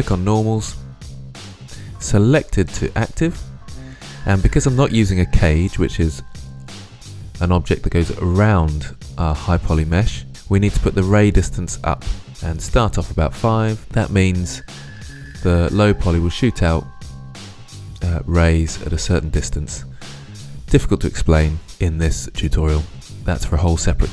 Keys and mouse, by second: 2.3-3.7 drag, 10.7-12.2 drag.